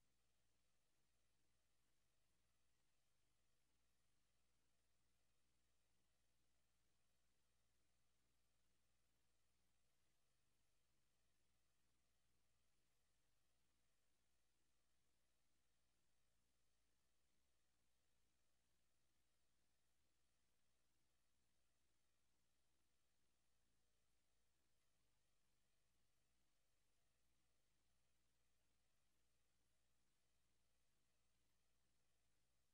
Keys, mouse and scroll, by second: 24.7 click, 26.2 click, 28.8 click.